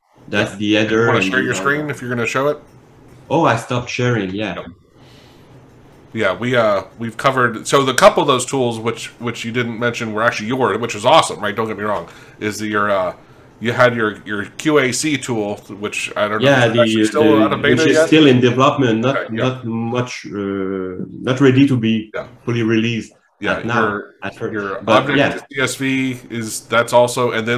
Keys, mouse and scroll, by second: 8.4 click, 9.9 click, 11.5-12.1 ctrl+scroll up 1, 12.1 ctrl+scroll up 1, 26.4 alt+Tab, 27.3 alt+Tab.